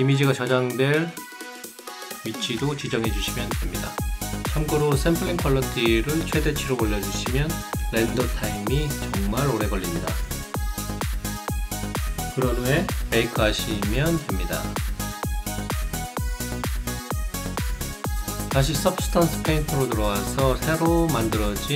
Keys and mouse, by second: 0.2 ctrl+click, 1.9 ctrl+click, 5.4 ctrl+k, 6.1 ctrl+click, 11.5 ctrl+click, 13.0 ctrl+click, 20.3 click.